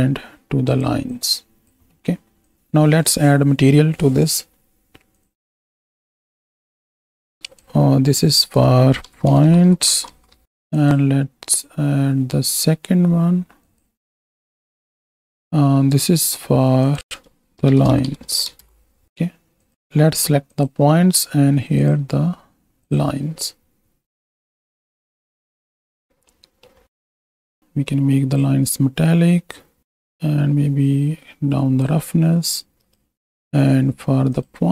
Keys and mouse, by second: 0.7 click, 1.1 click, 6.3-7.0 drag, 8.3-10.4 drag, 13.8-14.7 drag, 14.9 click, 17.0-18.7 drag, 19.7 click, 21.8-23.0 drag, 24.3 drag, 25.4 z, 26.4 middle drag, 27.2 middle click, 27.6-29.7 drag, 30.0-31.8 drag, 32.8 right click, 34.3-34.7 drag.